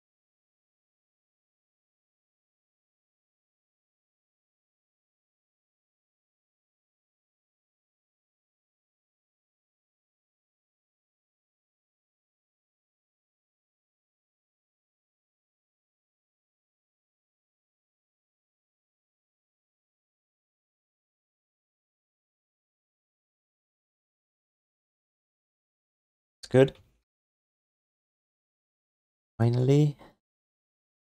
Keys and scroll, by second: 3.1 z, 3.3 z, 3.6 z, 3.9 z, 9.2 q, 14.1 q, 15.6 g, 16.4 alt+shift+d, 16.6 ctrl+s, 19.0 g, 19.6 alt+shift+d, 19.9 3, 21.3 alt+q, 22.1 1, 26.0 w, 27.0 ctrl+shift+d.